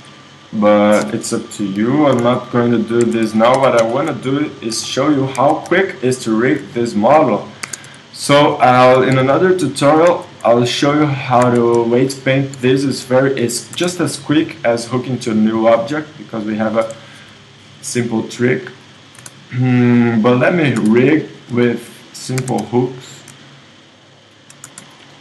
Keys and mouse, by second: 1.8 alt+o, 2.1 s, 3.0 Tab, 3.6 KP_1, 5.4 Tab, 7.6 ctrl+Tab, 9.1 a, 10.1 z, 11.4 KP_1, 12.6 a, 13.7 space, 18.5-22.4 right drag, 19.2 space, 20.8 space, 22.4 ctrl+Tab, 24.7 space.